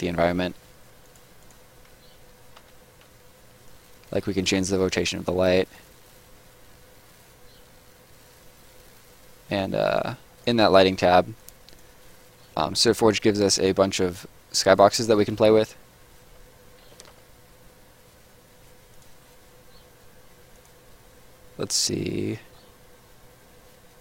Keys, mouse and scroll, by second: 0.1 middle click, 1.0 click, 1.9 w, 2.5 r, 3.3 e, 3.7 click, 11.3 click, 14.7 click, 15.5 scroll down 1, 16.9 s, 17.9 y, 18.9 click, 21.1-22.0 scroll down 1, 22.0-24.0 scroll up 1.